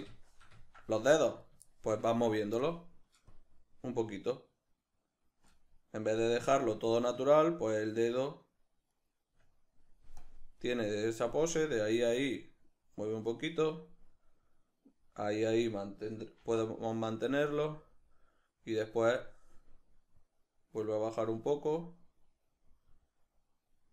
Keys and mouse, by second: 1.4 right click, 1.7-3.3 shift+middle drag, 3.3-7.4 drag, 7.4 right click, 10.2-17.3 drag, 16.4 shift+d, 17.6-23.9 drag.